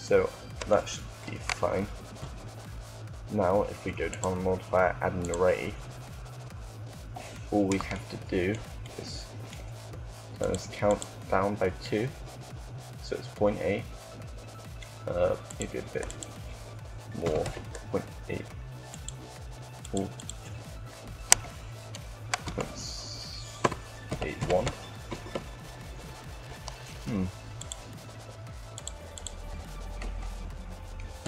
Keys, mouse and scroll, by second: 1.2 KP_3, 1.8 KP_3, 1.9 KP_1, 4.6-5.8 drag, 10.1-12.5 drag, 15.2-21.7 drag, 26.1-27.2 middle drag.